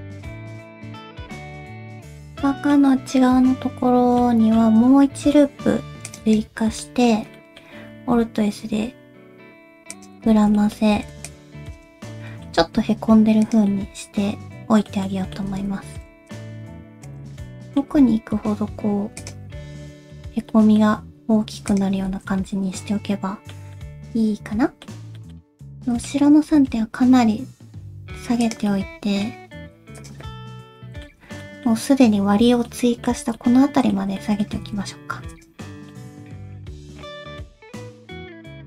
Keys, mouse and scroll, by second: 0.0 ctrl+click, 0.2 middle click, 0.4 g, 1.1 middle click, 1.3 scroll down 3, 1.6 middle click, 1.7 middle click, 2.4 middle click, 4.2 middle click, 5.1 ctrl+r, 6.8 middle click, 7.4 middle click, 8.0 alt+s, 10.3 alt+z, 10.6 middle click, 10.9 c, 12.0 alt+z, 12.6 middle click, 12.6 alt+s, 13.7 middle click, 15.1 middle click, 15.5 alt+z, 15.9 c, 17.3 alt+z, 17.9 middle click, 18.0 alt+s, 19.5 alt+z, 19.7 middle click, 20.3 alt+z, 20.5 middle click, 21.0 alt+s, 22.1 alt+z, 22.3 middle click, 23.7 middle click, 25.2 middle click, 25.3 alt+z, 25.3 middle click, 25.8 shift+middle click, 26.4 g, 28.7 middle click, 29.5 g, 30.2 middle click, 31.2 alt+z, 31.6 middle click, 32.7 middle click, 33.2 alt+z, 33.4 middle click, 34.2 middle click, 34.5 g, 35.7 shift+middle click, 36.2 click, 36.3 alt+z, 36.4 middle click, 37.0 alt+z, 37.1 middle click, 37.5 g, 38.0 middle click, 38.3 alt+z, 38.4 alt+z, 38.5 middle click.